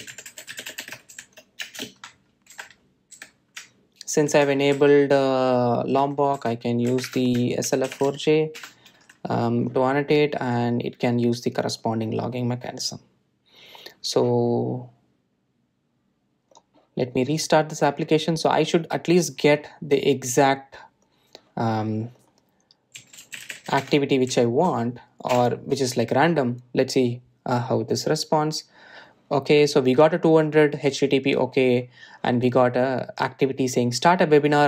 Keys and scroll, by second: 9.7 Return, 17.7 super+r.